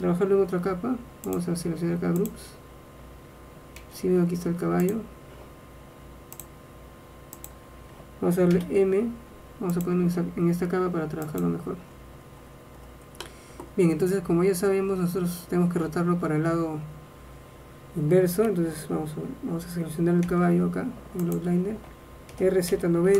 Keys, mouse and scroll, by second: 1.4-3.2 drag, 3.9 a, 5.0-8.2 drag, 8.7 m, 11.4 click, 13.2 middle click, 15.0 middle click, 20.4 a, 21.3-23.1 drag, 22.4 r.